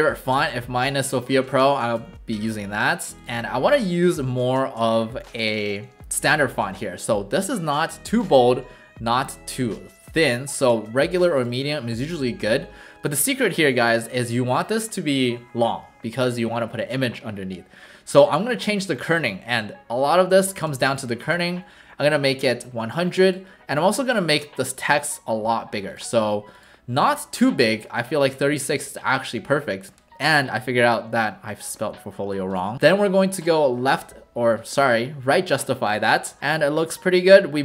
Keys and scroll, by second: 20.1-21.3 typing, 36.4 w.